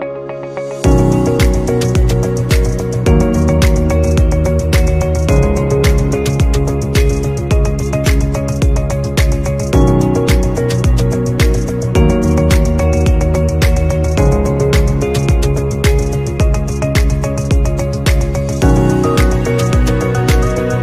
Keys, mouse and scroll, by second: 0.0-0.3 scroll down 1, 19.9 shift+click.